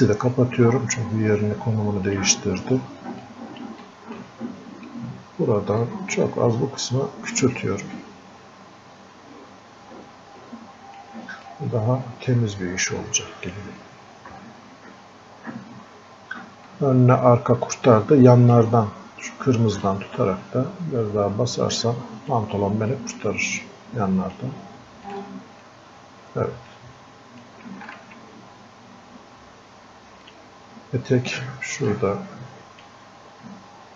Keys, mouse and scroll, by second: 0.1 x, 2.1 click, 3.8 alt+click, 4.6 scroll up 1, 5.6 scroll down 1, 5.8-7.4 alt+drag, 7.4-11.5 drag, 11.5-16.7 drag, 16.7-19.9 drag, 19.9-23.0 drag, 23.0-33.9 drag.